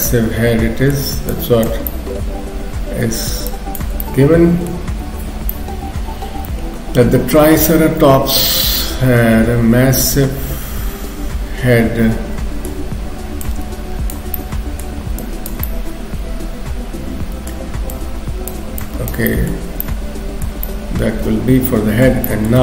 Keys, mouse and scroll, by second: 0.1 middle click, 1.3 click, 1.9 middle click, 3.5 shift+click, 4.0 middle click, 5.1 ctrl+s, 5.5 middle click, 13.4 click, 14.3 middle click, 15.2 click, 15.7 middle click, 17.9 click, 18.8 click, 19.3 middle click, 19.7-20.7 scroll down 3, 19.8 middle click, 20.7 middle click, 22.3 shift+middle click.